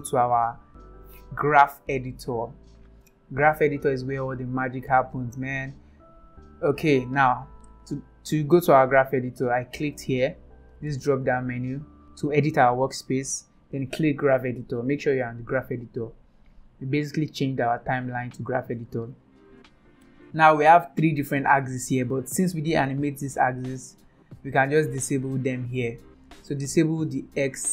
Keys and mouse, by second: 1.1-3.6 drag, 5.5 click, 8.4-10.3 drag, 10.4 click, 11.0 click, 11.7-14.9 drag, 16.2 click, 18.1 click, 20.2 click, 21.4 click, 22.9 click, 23.6 click, 24.2 click, 24.6-25.9 drag, 27.5 click.